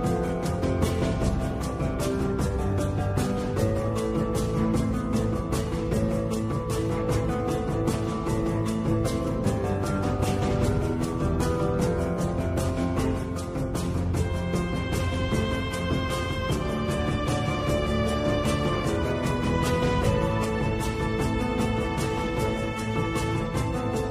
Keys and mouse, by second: 3.1-4.1 middle drag, 4.7 middle click, 6.4 ctrl+r, 8.6 KP_7, 10.3 shift+click, 16.6 click, 19.9 g.